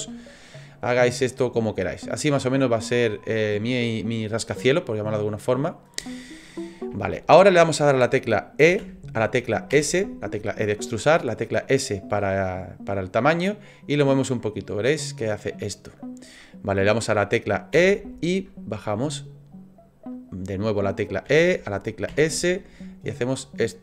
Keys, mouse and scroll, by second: 1.2 click, 2.3 middle click, 5.2 click, 6.1 shift+middle click, 6.6-7.0 scroll up 3, 7.0 shift+middle click, 8.7 e.